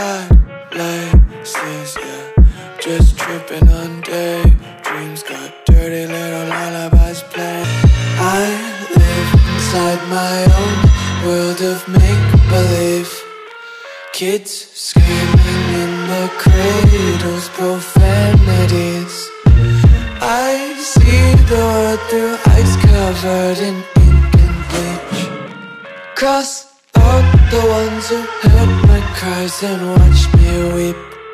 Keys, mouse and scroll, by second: 0.5 click, 9.4 click, 11.4 click, 16.1 Return, 17.2 ctrl+a, 18.5 ctrl+click, 22.0 ctrl+d, 23.1 click, 27.0 click.